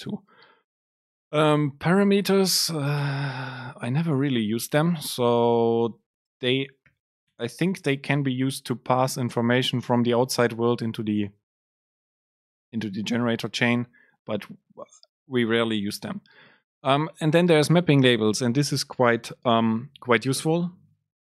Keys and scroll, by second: 3.1 Return, 6.5 super+space, 7.3 BackSpace, 14.2 Up, 14.9 Down.